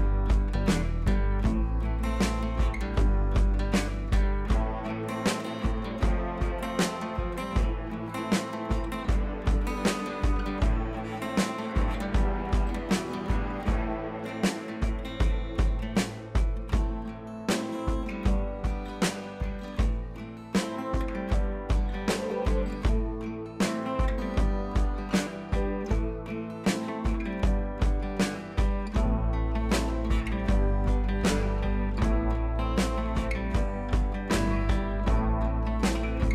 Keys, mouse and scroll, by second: 0.0-0.4 typing, 0.2 click, 0.5 click, 4.5 shift+click, 5.6 shift+click, 7.6 scroll down 1, 8.8 scroll up 1, 9.5 ], 9.6 ], 9.8 ], 9.9 click, 12.6 right click, 13.4-17.8 drag, 22.9-26.6 drag.